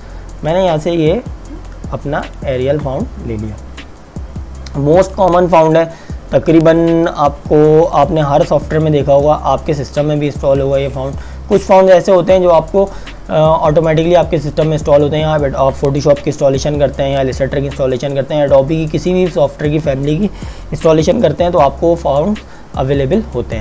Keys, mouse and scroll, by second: 2.3 click, 5.9 click, 10.5 click.